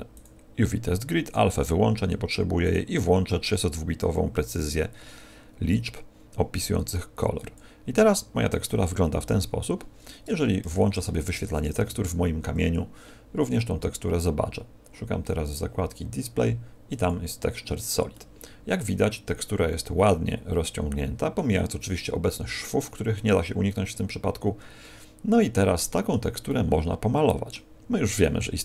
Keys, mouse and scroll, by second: 8.4-9.4 scroll down 7, 9.4 scroll down 2, 10.2 Tab, 10.6 z, 11.8 n, 13.0-13.3 scroll down 5, 13.7 scroll down 3, 17.0 click, 18.1 middle click, 23.6 middle click, 26.4 middle click.